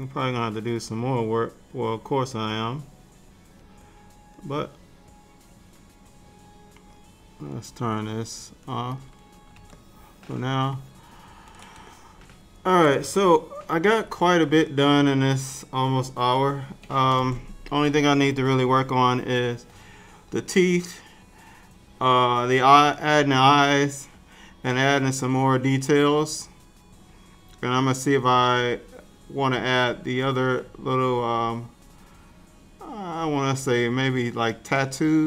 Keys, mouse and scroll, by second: 0.2 click, 1.4 click, 3.0 click, 3.5 click, 4.0 click, 4.8 click, 6.4 click, 8.1 click, 9.8 ctrl+middle click, 10.8 ctrl+middle click, 11.9 shift+middle click, 12.0 shift+middle click, 13.8 ctrl+s, 21.7-22.5 scroll down 2, 22.5-24.7 scroll up 2, 24.7 middle click, 29.8 middle click, 31.2-31.7 scroll down 2, 31.7-34.5 scroll up 1.